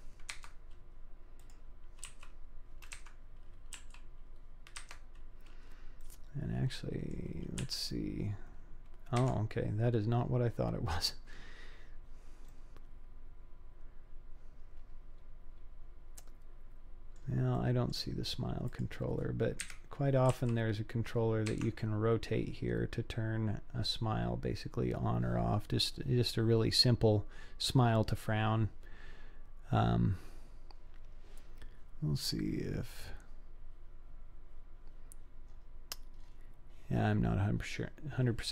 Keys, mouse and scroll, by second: 1.4 click, 2.1 r, 3.8 g, 6.0 middle click, 6.1-7.1 drag, 7.7 g, 10.0-10.9 scroll up 2, 10.9-11.7 scroll down 1, 12.5 middle click, 14.5-17.2 middle drag, 17.6 middle click, 18.7 click, 19.6 KP_1, 20.4 r, 22.2-22.5 scroll down 2, 23.3 scroll down 2, 24.1 scroll up 2, 31.6-32.3 scroll down 1, 32.3 click, 32.8-35.4 scroll down 3, 35.5-36.2 scroll up 3, 36.2-37.1 scroll up 4.